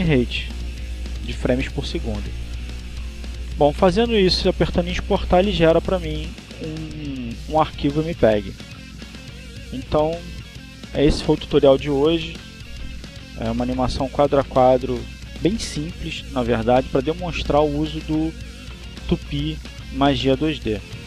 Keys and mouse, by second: 0.3 KP_2, 0.4 KP_4, 8.4 click, 10.1 click, 12.8 click, 14.2 click.